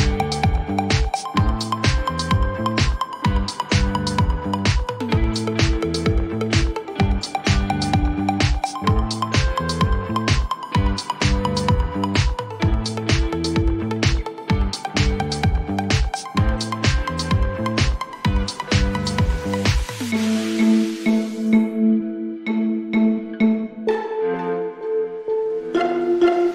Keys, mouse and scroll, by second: 1.2-4.8 drag, 8.0-11.2 drag, 11.2 click, 13.2 click, 14.1-15.6 drag, 19.2-20.9 drag, 19.6-22.6 typing, 21.7 click, 25.8 middle click, 25.9 scroll.